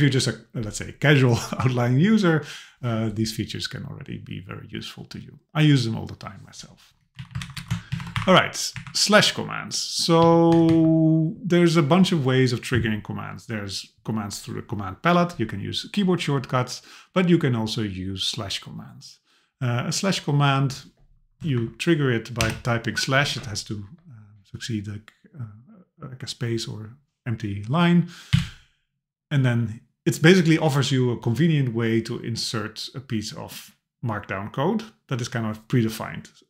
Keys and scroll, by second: 7.2 Down, 7.4 super+Left, 7.9 shift+Down, 8.1 Delete, 8.8 Up, 10.2 Down, 10.5 Right, 21.5 super+Right.